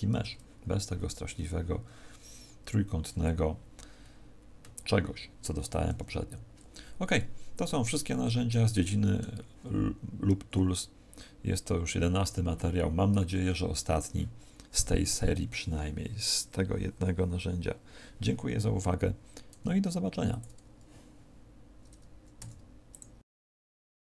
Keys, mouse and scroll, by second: 0.0 Tab, 5.8 Tab, 6.7-7.0 scroll down 2, 7.0 middle click, 22.2 q.